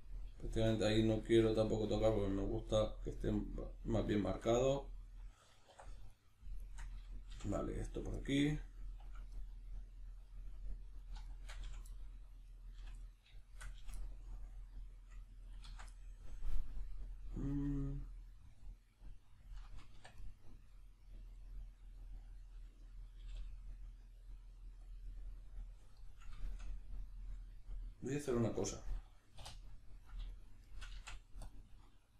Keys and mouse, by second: 5.7 2, 6.1 right click, 6.6 shift+right click, 7.3 f, 7.8 right click, 8.2-11.0 middle drag, 11.0 right click, 11.3 shift+right click, 11.6 f, 11.9 middle click, 12.5 right click, 12.8 f, 13.0-20.2 middle drag, 13.8 f, 15.6 ctrl+z, 20.0 1, 20.2 right click, 20.7-24.9 middle drag, 23.1 g, 24.9 click, 25.0-30.0 middle drag, 29.3 3, 30.0 right click, 30.3 shift+right click, 30.6 shift+right click, 30.9 x.